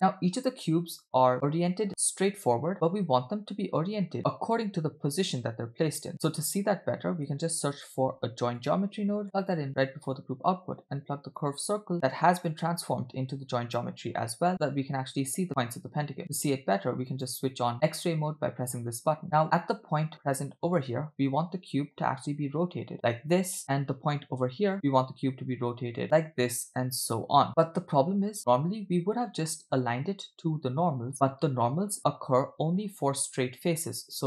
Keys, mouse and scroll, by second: 1.3 middle click, 1.3 w, 5.1-6.1 scroll up 1, 6.1-6.6 scroll up 1, 8.0 shift+a, 11.4-11.9 drag, 12.5-13.8 drag, 14.5-15.1 scroll up 3, 15.2-16.4 scroll down 2, 17.1 click, 19.5 e, 20.9 click, 21.9 click, 22.5 click, 23.6 click, 24.2 click, 24.8 click, 25.5 click, 26.0 ctrl+z, 26.0 click, 26.8 click.